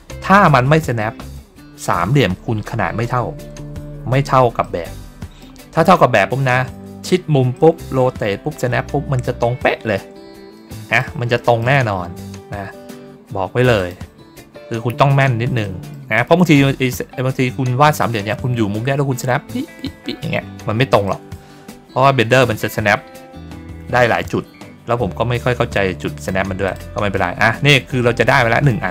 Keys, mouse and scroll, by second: 0.8 middle click, 1.8 middle click, 3.8 ctrl+middle click, 4.5 middle click, 7.4 middle click, 10.4 middle click, 11.3 middle click, 13.7 click, 15.5 middle click, 16.1 ctrl+middle click, 16.2 ctrl+middle click, 17.0 ctrl+middle click, 17.6 ctrl+middle click, 21.0 middle click, 21.4 ctrl+middle click, 21.7 ctrl+middle click, 26.1 click, 26.6 click, 28.3 middle click.